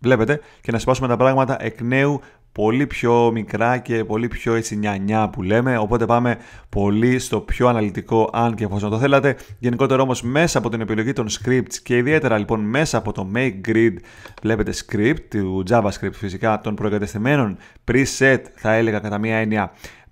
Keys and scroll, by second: 6.7 super+z, 8.3 super+z, 11.3 super+z.